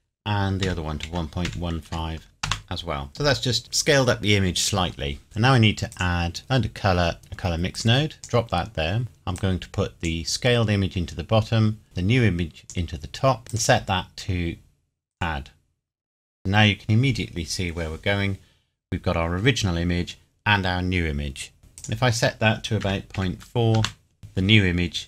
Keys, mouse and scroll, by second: 0.6 KP_1, 1.0 KP_Decimal, 1.5 KP_1, 1.8 KP_5, 2.4 KP_Enter, 5.9 click, 7.8 click, 9.4 click, 13.5 click, 21.8 click, 22.8 KP_Decimal, 23.2 KP_4, 23.8 KP_Enter.